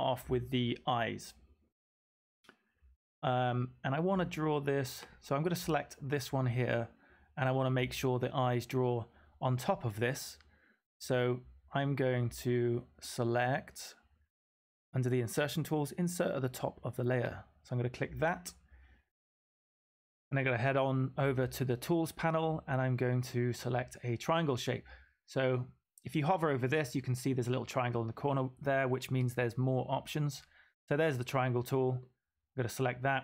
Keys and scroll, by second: 17.6 v, 32.0 v.